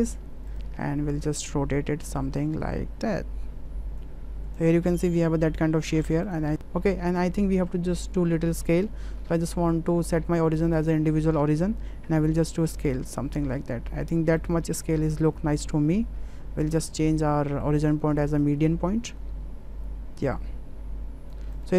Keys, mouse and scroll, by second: 2.4-4.0 drag, 4.6 drag, 4.8-5.8 middle drag, 6.5 s, 6.6 ctrl+z, 8.7-10.9 drag, 12.0 s, 16.7-18.5 drag, 19.0-21.3 drag, 21.5 click.